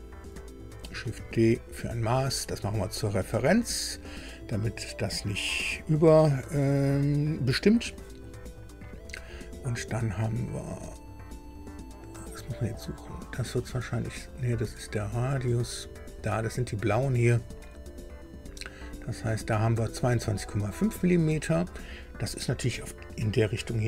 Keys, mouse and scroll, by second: 1.2 shift+d, 2.9 click, 8.0 click, 13.2-15.3 drag, 16.4-21.1 drag.